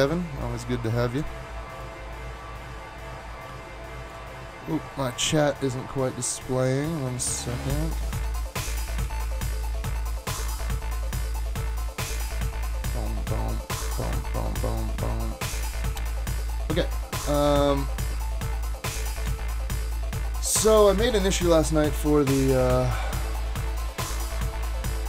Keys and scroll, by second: 5.2 super+Tab, 8.0 super+`, 8.2 super+`, 8.6 typing.